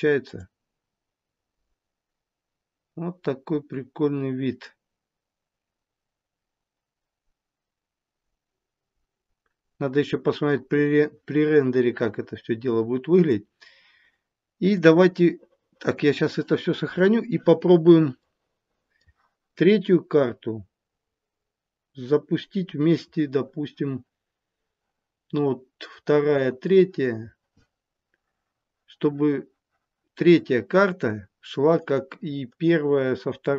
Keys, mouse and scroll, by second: 0.2 click, 13.1 click, 14.8 click, 18.2 middle click, 30.9 click, 31.8 click.